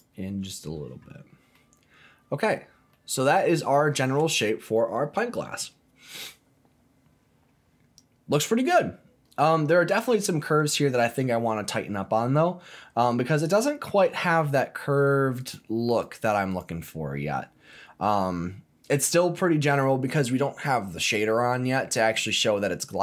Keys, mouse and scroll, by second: 1.2-1.5 scroll down 2, 1.5-2.5 middle drag, 2.5-2.9 scroll down 2, 2.9-9.4 middle drag, 9.7-14.0 middle drag, 15.5 click, 16.0 click, 16.5 click, 17.2-19.9 middle drag.